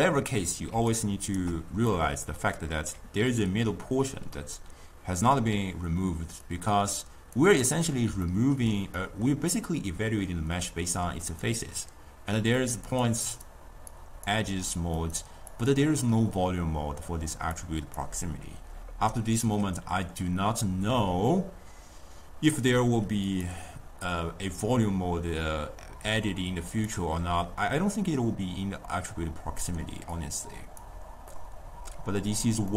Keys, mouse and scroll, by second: 0.0-0.8 middle drag, 0.8 d, 1.0 right click, 1.5 d, 2.0-3.4 middle drag, 3.4 d, 6.6-7.7 drag, 7.7-11.3 middle drag, 11.3-17.7 drag, 17.8 click, 23.4-29.8 drag, 30.2 click, 31.4-32.7 middle drag.